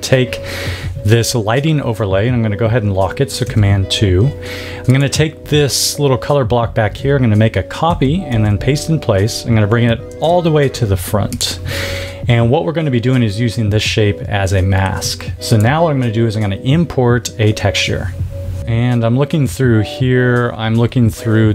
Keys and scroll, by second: 3.4 super+2, 7.8 super+c, 8.2 super+f, 10.2 shift+super+].